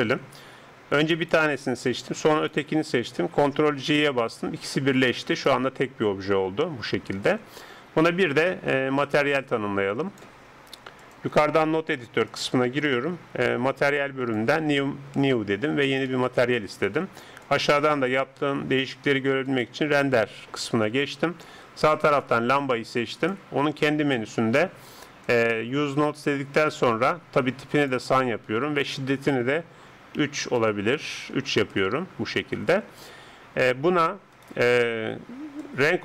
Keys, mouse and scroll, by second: 3.8 ctrl+j, 5.3 right click, 6.3 g, 9.0-19.5 drag, 17.4 middle click, 22.2-30.7 drag, 31.9-34.3 middle drag, 34.3-36.0 right drag, 35.7-36.0 drag.